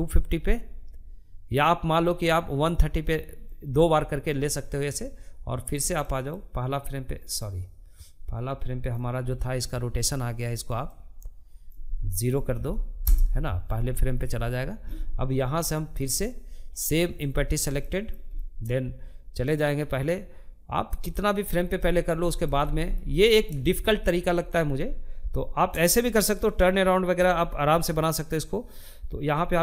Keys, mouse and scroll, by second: 2.6-5.6 middle drag, 5.6-7.7 drag, 7.7-9.3 middle drag, 9.3-12.4 drag, 14.1-15.6 shift+middle drag, 15.6 click, 16.2-18.0 shift+middle drag, 18.0-20.3 drag, 20.3 shift+middle click, 21.0 scroll down 1, 21.2-29.6 shift+middle drag.